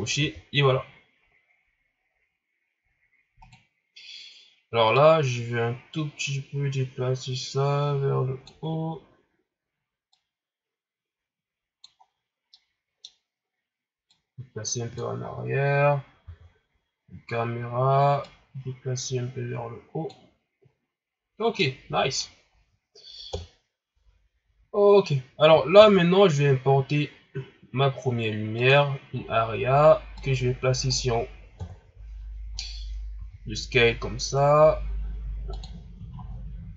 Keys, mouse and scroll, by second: 0.1 n, 0.4 scroll down 4, 1.0-1.9 scroll up 5, 1.9-2.6 scroll down 1, 2.6 scroll down 2, 3.4 right click, 4.9-8.5 drag, 10.1-12.0 drag, 12.0-12.5 scroll down 2, 12.5-13.1 middle drag, 13.1-14.1 scroll down 1, 14.1-16.3 drag, 16.3 KP_0, 17.1 scroll up 2, 18.2-20.8 drag, 20.8-21.6 scroll down 1, 21.6-22.4 middle drag, 22.4 scroll down 3, 23.3 KP_1, 28.7 shift+a, 29.1 scroll down 3, 30.2-31.6 drag, 31.6 KP_3, 32.5-33.1 scroll up 1, 33.1 s, 36.1 shift+scroll up 5.